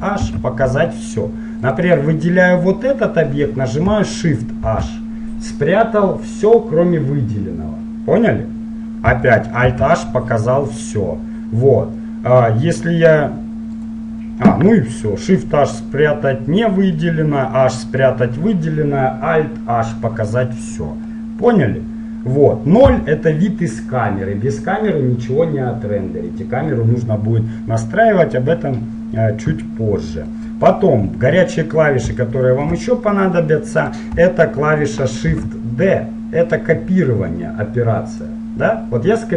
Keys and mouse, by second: 0.4 alt+h, 1.8-3.8 drag, 4.8 shift+h, 9.8 alt+h, 14.0-21.2 right drag, 21.2-23.0 middle drag, 23.0 KP_0, 30.4-36.2 middle drag, 35.5 shift+d.